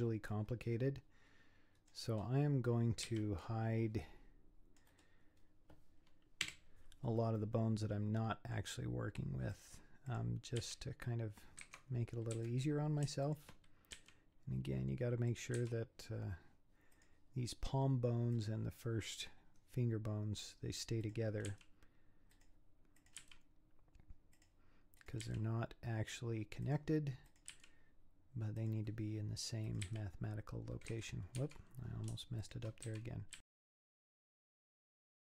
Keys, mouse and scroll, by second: 3.1 c, 6.4 h, 7.4-9.5 middle drag, 9.5 click, 10.1 click, 10.6 g, 12.4 z, 13.0 scroll up 1, 13.2 shift+click, 14.0 g, 15.6 z, 16.9 click, 18.3 click, 21.0 click, 21.5 g, 23.0 click, 23.2 g, 25.0 click, 25.2 g, 27.3 click, 27.6 g, 29.6 click, 29.9 g, 31.4 z, 31.8-32.4 scroll up 4, 32.4 shift+click, 32.9 z, 33.4 g, 33.5 scroll down 6, 33.7 alt+h, 33.8 middle click, 34.9-35.3 typing, 35.0 middle click, 35.2 scroll up 4.